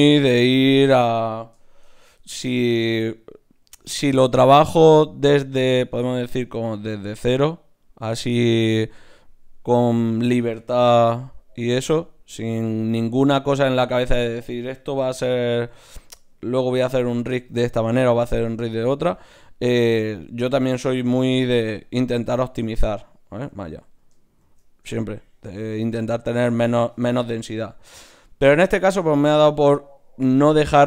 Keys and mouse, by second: 0.0 right click, 0.4-3.6 middle drag, 3.6 d, 3.8-5.9 drag, 10.8 shift+q, 14.1-16.6 right drag, 14.9 g, 16.1 g, 18.0-19.0 middle drag, 19.0 right click, 19.3 g, 21.1 shift+q, 24.4 shift+q, 26.2-30.8 middle drag.